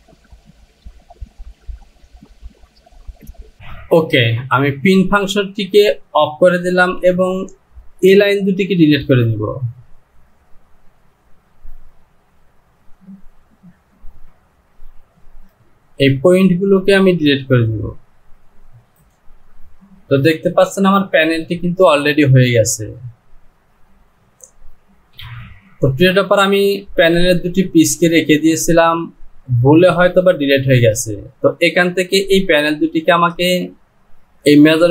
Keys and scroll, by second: 3.2 Home, 7.0 Delete, 25.2 typing.